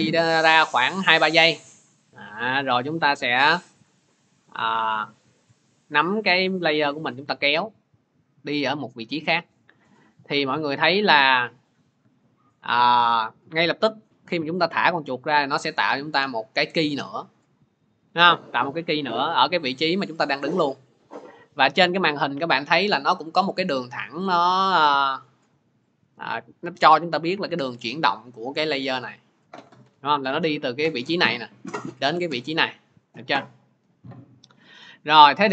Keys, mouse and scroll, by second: 30.9 click, 32.4 click.